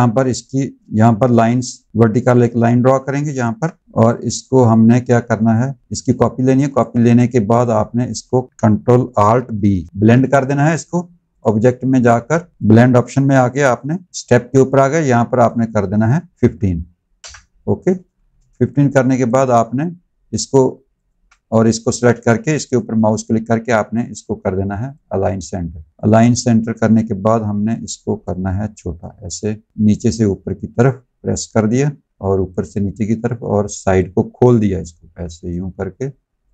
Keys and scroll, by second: 9.7 ctrl+alt+b, 16.3 KP_5, 17.1 Return, 18.2 v.